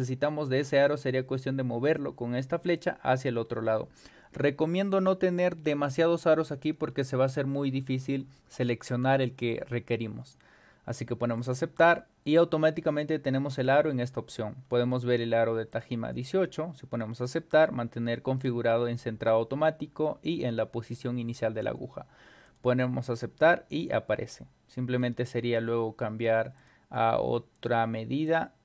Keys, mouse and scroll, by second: 2.6 click, 11.4 click, 12.9 scroll down 2, 13.7 middle click, 13.7 scroll up 2, 14.6 scroll down 2, 15.7 click, 22.5 click, 23.7 scroll up 2, 25.0 right click, 26.6 click, 27.5 click, 28.3 click.